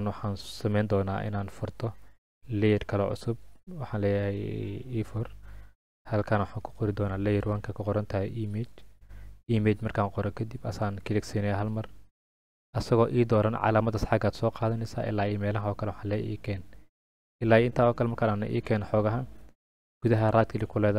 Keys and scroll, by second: 8.0-9.2 typing.